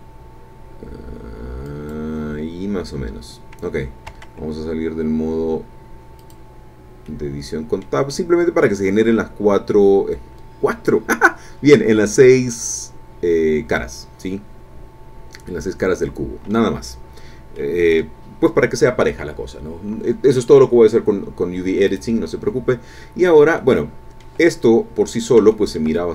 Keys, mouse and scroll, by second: 1.7 click, 4.2 Tab, 6.2 click, 7.0 click, 8.1 click, 8.6 scroll down 1, 11.2-11.9 scroll up 3, 12.0-12.3 scroll down 2, 12.5-16.7 drag, 17.6 click, 21.9 click, 23.2-23.5 scroll down 2, 23.6 middle click, 25.0 scroll down 2, 25.4-26.1 shift+middle drag.